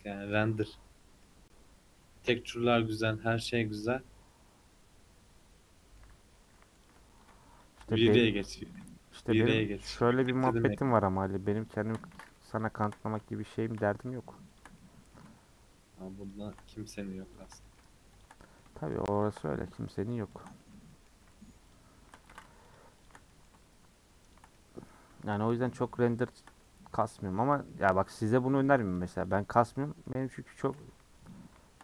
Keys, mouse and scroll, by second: 1.2-1.9 scroll up 4, 2.0-2.6 scroll down 3, 2.6-6.1 middle drag, 6.1-6.5 scroll up 2, 6.8 alt+click, 7.6 alt+shift+click, 8.6 alt+shift+click, 9.1-10.1 middle drag, 10.1 alt+shift+click, 10.3-11.7 middle drag, 11.7 alt+shift+click, 12.1 ctrl+z, 12.6 alt+shift+click, 13.0 middle click, 13.6 alt+shift+click, 13.8 middle click, 14.6 alt+shift+click, 14.8-16.3 middle drag, 16.3 alt+shift+click, 16.7 middle click, 17.4 alt+shift+click, 17.6 middle click, 18.2 alt+shift+click, 18.4-19.2 middle drag, 19.2 alt+shift+click, 19.4-20.4 middle drag, 20.4 alt+shift+click, 20.6-21.7 shift+middle drag, 21.7 alt+shift+click, 22.3 ctrl+z, 22.7 alt+shift+click, 23.0 alt+shift+click, 23.3-24.3 middle drag, 24.3 alt+shift+click, 24.5-26.4 middle drag, 26.4 alt+shift+click, 26.9 scroll down 1, 27.1 middle click, 27.7-28.3 scroll up 4, 28.3 middle click, 29.0 click, 29.7 middle click, 30.0-30.5 scroll down 2, 30.5 middle click, 31.3 alt+shift+click.